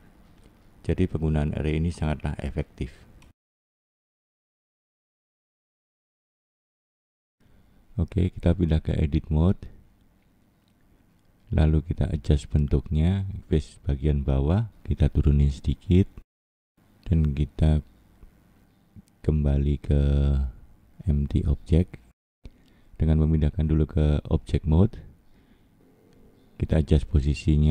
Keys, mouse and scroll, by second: 4.3 middle click, 5.5 middle click, 7.4 click, 7.9 click, 9.7 scroll down 1, 9.9 scroll up 1, 10.6 scroll up 3, 10.7 middle click, 13.6 click, 14.1 middle click, 15.0 click, 15.6 middle click, 17.4 click, 17.9 middle click, 19.4 click, 21.0 middle click, 22.4-23.4 scroll up 3, 23.4 click.